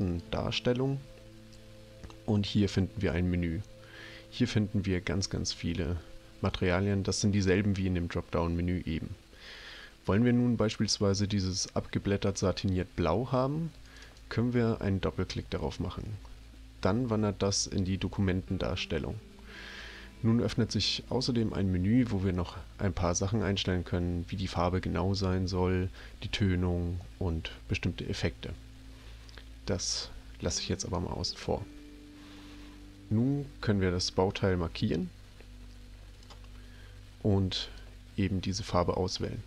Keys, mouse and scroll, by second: 0.0 click, 3.8-4.6 scroll down 3, 5.6-6.3 scroll up 1, 6.4 scroll up 1, 13.9 click, 14.0 click, 30.8 click, 34.2-36.2 drag, 37.6 click.